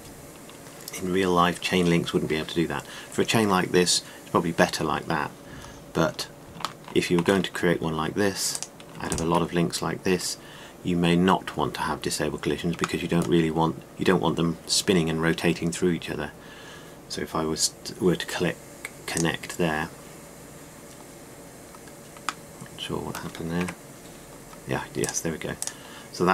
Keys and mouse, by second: 6.6-8.5 middle drag, 8.5-10.0 drag, 12.5-15.4 middle drag, 24.5 KP_Decimal, 25.6-26.3 middle drag.